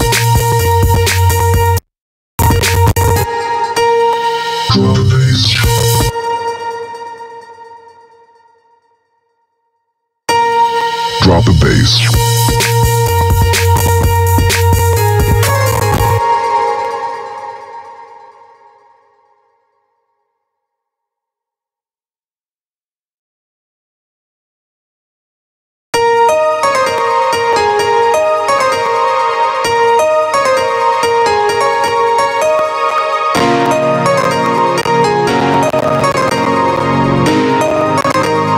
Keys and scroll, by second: 9.8 space, 15.6 space, 25.3 space.